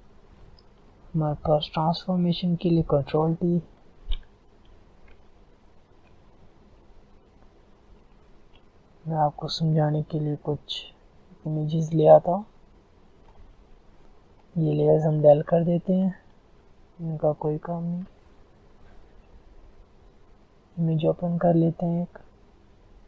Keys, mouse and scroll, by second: 3.1 ctrl+t, 5.5 shift+click, 7.1 Return, 7.3 click, 7.7 Return, 8.4 click, 9.1 Return, 9.7-15.7 drag, 16.1 ctrl+click, 17.7 shift+click.